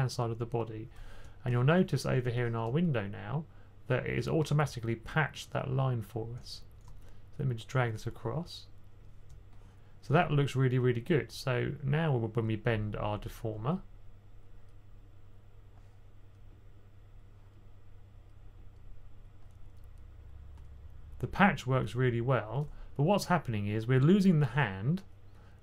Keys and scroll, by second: 1.8 typing.